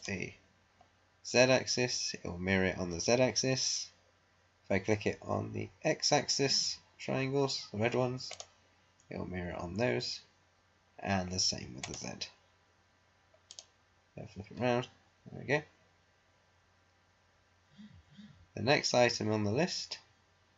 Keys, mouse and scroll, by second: 8.3 click, 11.7 click.